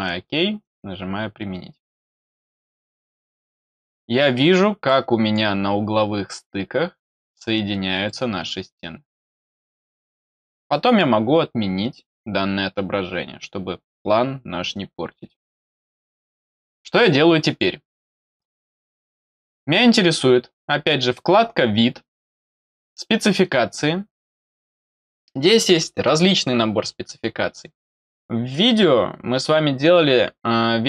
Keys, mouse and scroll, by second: 0.5 click, 2.5 click, 3.4 middle click, 4.8 middle click, 5.8 scroll down 1, 7.4-7.9 scroll down 2, 8.0 middle click, 9.8 middle click, 10.6 middle click, 16.2 scroll down 1, 16.9 middle click, 22.7 click.